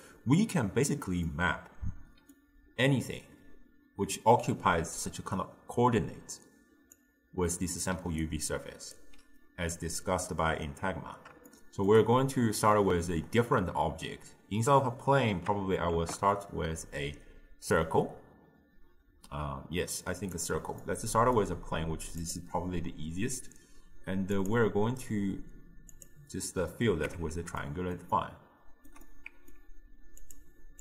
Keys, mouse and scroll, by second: 0.0 click, 1.5-7.0 middle drag, 7.0-8.2 drag, 8.2-11.5 right drag, 11.5-16.2 shift+middle drag, 21.0-26.1 shift+middle drag, 26.1-27.1 drag, 27.1 Tab, 27.7-30.8 middle drag.